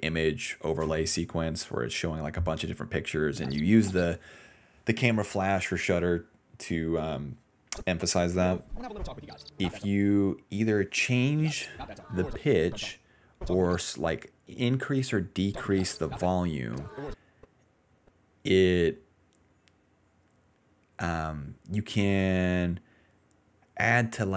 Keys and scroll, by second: 3.3 space, 3.6 space, 5.5 ctrl+c, 6.0 alt+v, 7.1 s, 7.9 ctrl+s, 8.3 space, 8.6 d, 9.4 d, 9.8 space, 11.3-13.7 typing, 15.4-17.0 typing, 18.9 a.